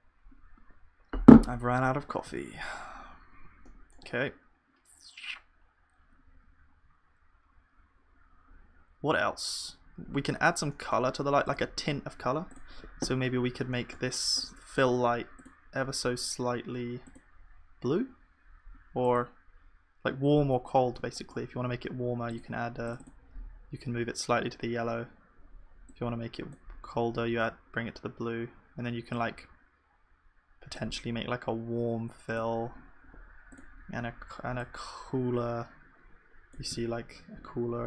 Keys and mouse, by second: 2.3 ctrl+s, 3.0 middle click, 3.9-5.7 middle drag, 10.8-22.9 middle drag, 14.0-20.6 right drag, 22.9 click, 36.8-37.8 middle drag.